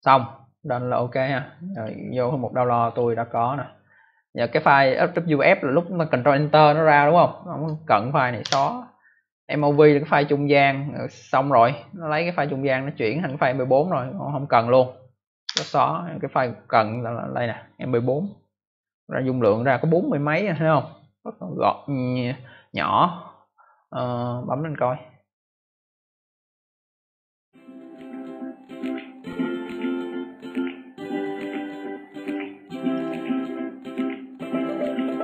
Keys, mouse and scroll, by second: 1.6 click, 2.8 click, 4.9 click, 8.3 Delete, 9.5 click, 12.6 click, 15.4 Delete, 16.2 click, 24.4 click, 24.5 click, 32.1 click, 32.2 click, 32.9 click, 33.0 click.